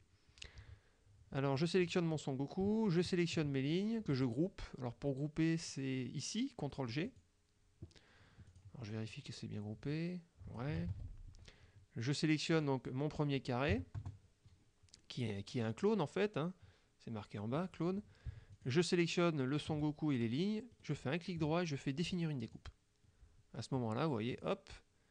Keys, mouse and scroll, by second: 1.7 click, 2.9 shift+click, 7.2 click, 8.6 click, 9.2-10.9 drag, 11.0 ctrl+z, 12.6 click, 13.8 KP_Subtract, 14.1 KP_Add, 18.6 shift+click, 20.8 right click, 22.5 click, 24.4 click.